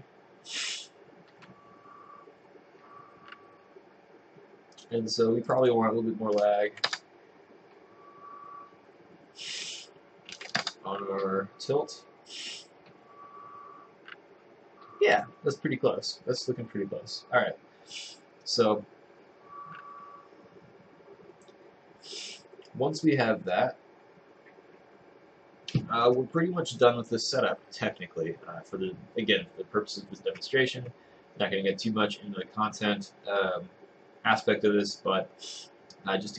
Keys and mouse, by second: 7.0 Return, 10.7 Return.